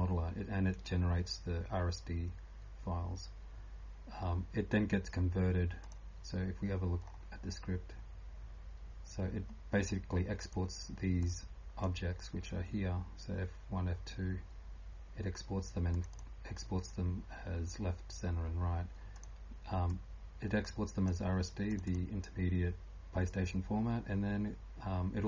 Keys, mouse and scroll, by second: 0.0-25.2 typing, 7.0-7.4 scroll up 3, 8.1 scroll down 1, 9.9 click, 9.9 scroll down 1, 19.1 click, 23.9 scroll down 1.